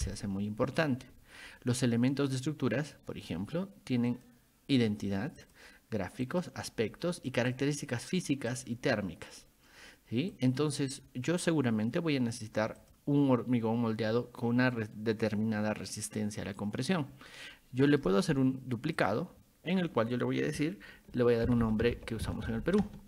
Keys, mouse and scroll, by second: 0.1 click, 4.1 click, 5.4 click, 6.3 click, 7.5 click, 8.5 click, 12.8 click, 17.9 right click, 19.0 click, 21.2-23.0 typing.